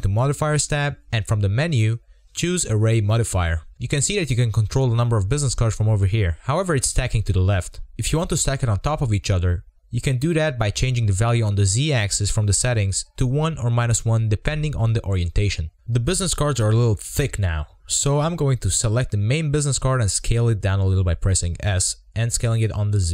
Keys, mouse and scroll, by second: 1.4-4.3 drag, 4.3 shift+middle click, 4.8-5.5 scroll up 3, 5.5 scroll down 1, 8.1-10.4 drag, 10.4-10.7 middle drag, 10.7 scroll up 5, 10.9-12.0 shift+middle drag, 12.0 click, 12.4-12.9 scroll down 5, 12.9-15.6 middle drag, 15.6 KP_0, 16.3-17.2 scroll up 4, 18.4-20.4 drag, 20.4-20.7 scroll up 1, 20.7 Tab, 21.6 s, 21.9 s, 22.9 Tab.